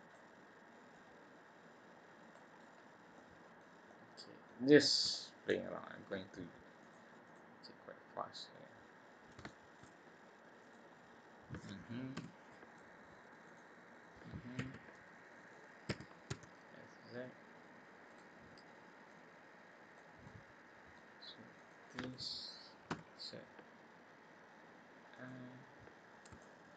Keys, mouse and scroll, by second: 0.9 click, 2.8-3.1 scroll down 1, 3.1 middle click, 3.8 middle click, 4.6 scroll up 2, 5.1 shift+middle click, 6.8 click, 7.2 click, 8.9-9.3 scroll up 2, 9.4 shift+middle click, 10.6 click, 11.0-11.9 scroll up 2, 12.1 i, 13.8 scroll down 2, 14.6 e, 15.8 s, 19.0 click, 20.2 middle click, 21.5 click, 22.8 i, 25.9 scroll up 1, 26.4 shift+middle click.